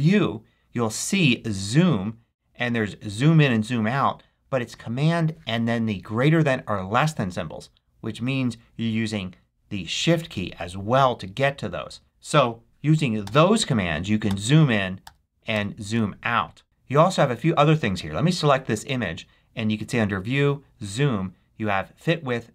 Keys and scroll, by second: 13.1 shift+super+., 14.9 shift+super+,.